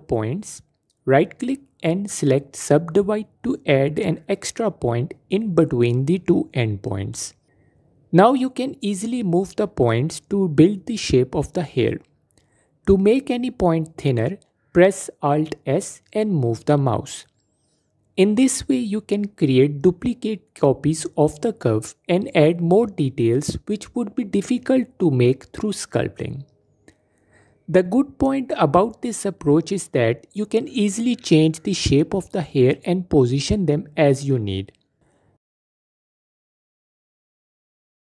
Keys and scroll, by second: 14.4 alt+s, 23.0 Tab, 23.9 shift+d, 28.8 shift+d, 32.8 Tab, 38.0 Tab.